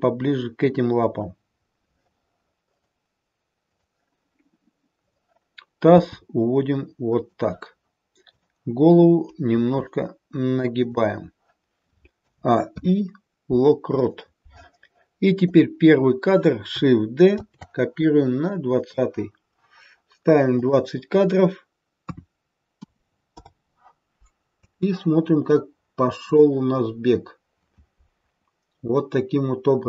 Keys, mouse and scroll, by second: 4.9 click, 6.0 g, 8.2 click, 9.4 r, 12.1 a, 12.6 i, 15.4 click, 17.4 shift+d, 20.5 click, 24.5 space, 26.3 click.